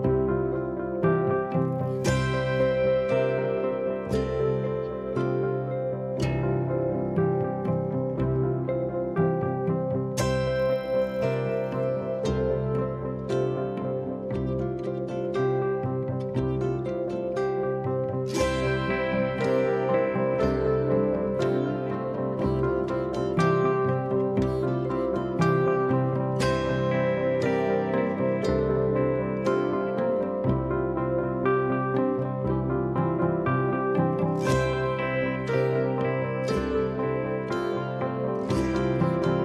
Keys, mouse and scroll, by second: 1.5-5.4 drag, 8.0 click, 9.6 click, 11.2-13.0 drag, 14.4 click, 17.1-19.6 drag, 22.2 click, 23.1-25.4 drag, 30.2 click, 34.8-36.4 drag.